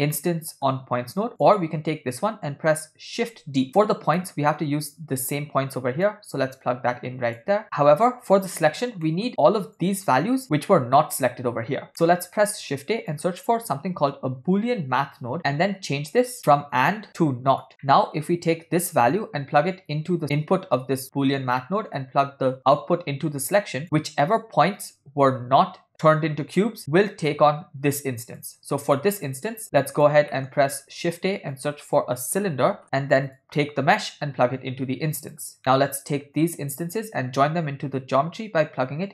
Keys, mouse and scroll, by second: 0.2 middle click, 1.4 click, 3.4 shift+d, 4.2 middle click, 6.1-7.5 drag, 9.1 middle click, 9.8 click, 11.9 middle click, 12.4 shift+a, 14.3 o, 16.8 click, 17.9 middle click, 19.0 click, 20.2-20.5 drag, 21.7 middle click, 22.7 click, 23.8 click, 26.8 middle click, 28.0 click, 29.0 middle click, 29.6 click, 30.4 shift+middle click, 30.8 shift+a, 34.1-35.4 drag, 35.6 middle click, 36.4 click, 36.6-39.1 drag.